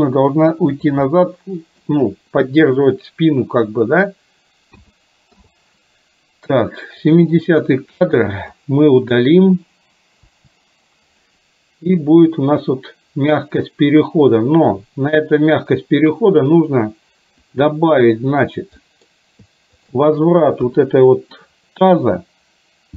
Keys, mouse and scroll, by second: 1.1 middle click, 4.9 a, 5.4 i, 7.2 click, 8.6-9.1 drag, 10.4 Delete, 12.1-16.5 drag, 17.5 click, 18.9 middle click, 19.9 shift+click, 20.7 KP_3.